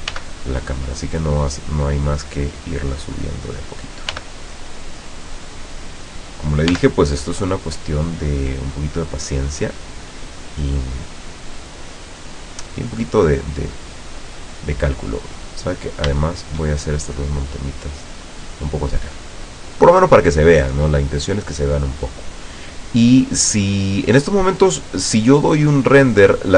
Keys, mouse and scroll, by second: 0.2 g, 3.0 click, 4.2 g, 6.4 click, 6.8 g, 7.0 middle click, 10.4 click, 11.0 scroll up 1, 12.7 right click, 13.8-15.4 drag, 16.3 shift+right click, 17.3 click, 24.2-24.5 scroll down 2, 24.6-25.3 middle drag.